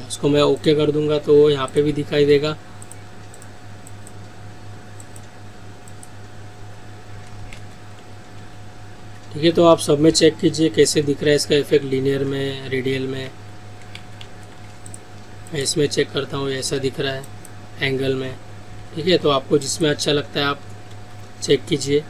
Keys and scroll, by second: 7.6 ctrl+z, 11.0 ctrl+alt+z, 12.3 ctrl+z, 14.0 ctrl+alt+z, 16.8 ctrl+z.